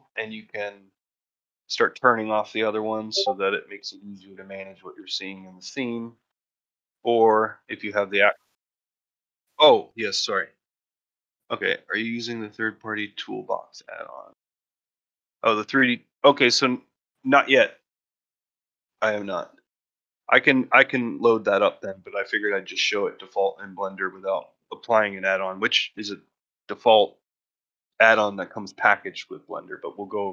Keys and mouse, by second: 1.3-3.9 drag, 4.5 click, 5.2-6.1 drag, 6.3-6.9 drag, 7.9 click.